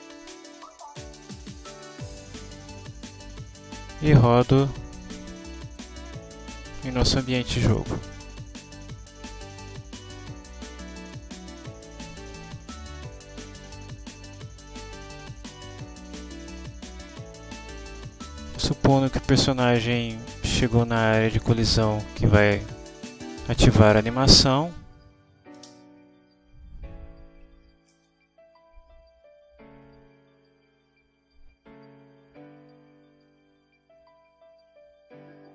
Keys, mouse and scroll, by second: 0.6 click, 1.5 click, 5.8 click, 8.5 click, 11.0 click, 11.7-13.0 drag, 13.0 click, 14.1-15.0 drag, 15.3 click, 16.1-19.8 drag, 20.1 click, 21.0 click, 21.7-24.6 drag, 25.7 space.